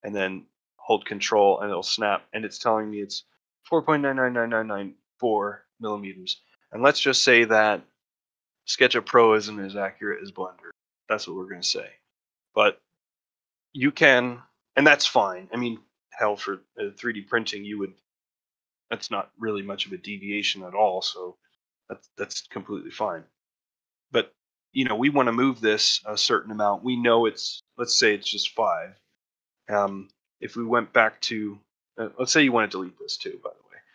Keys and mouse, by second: 2.8 ctrl+middle click, 17.8 middle click, 18.2 ctrl+middle drag, 20.4 ctrl+middle click, 22.5 ctrl+middle drag, 22.9 middle click, 23.3 shift+middle drag, 23.9 middle click, 28.8-29.5 middle drag, 29.8 shift+middle drag, 30.1 ctrl+middle drag, 30.4 middle drag.